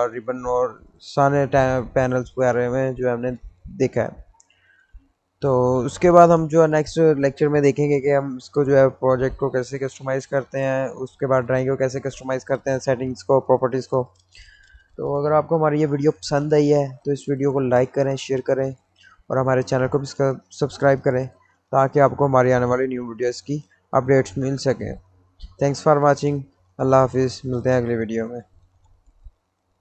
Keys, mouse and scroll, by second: 19.0-22.5 middle drag, 22.5-26.0 middle drag, 29.2 click.